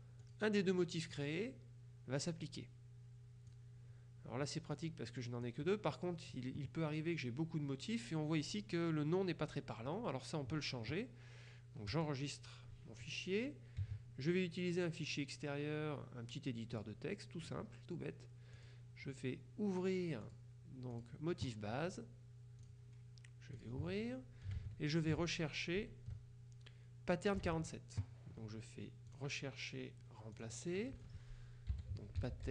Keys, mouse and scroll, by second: 0.3 click, 1.3 click, 2.3 click, 3.6 click, 5.6 click, 12.0 click, 16.8 click, 18.6 click, 20.3 click, 21.0 click, 22.7 click, 23.7 click, 24.8 alt+Tab, 27.6 alt+Tab, 29.2 click, 30.4 click, 31.6-32.5 typing.